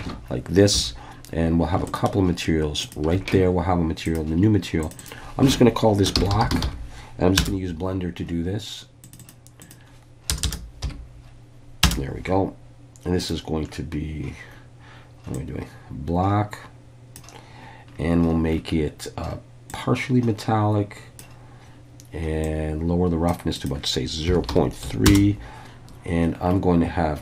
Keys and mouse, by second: 0.0 alt+a, 0.7 3, 2.8 alt+shift+click, 4.1 click, 4.8 click, 5.0-7.9 drag, 9.0 click, 9.2-12.4 drag, 10.4 BackSpace, 19.7-21.3 drag, 22.5 click, 23.5-25.6 drag.